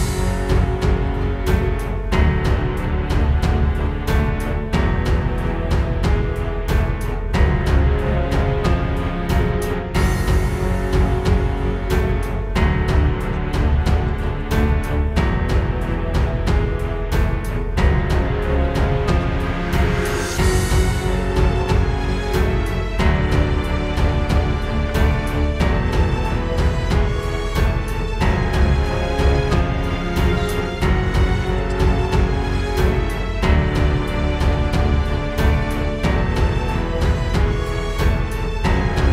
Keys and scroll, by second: 0.5 space, 2.2 space, 9.2 space, 9.7 super+space, 13.2 alt+super+space, 17.6 space, 18.2 space, 18.5 space, 29.3 space, 31.1 space, 31.4 space, 34.2 space, 34.7 alt+super+space.